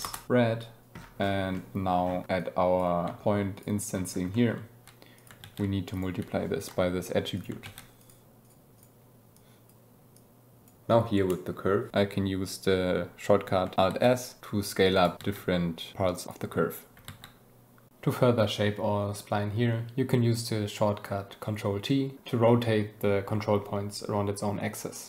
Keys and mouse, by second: 0.5 drag, 1.5 click, 2.3-2.7 drag, 3.0 g, 3.5 click, 4.3 click, 5.1 click, 5.3 shift+d, 5.9 click, 7.3 click, 7.5 shift+d, 7.9 click, 8.4 click, 9.3 click, 10.1 click, 11.2 shift+middle click, 13.8 alt+s, 14.9 click, 15.2 alt+s, 17.0 alt+s, 18.8 ctrl+t.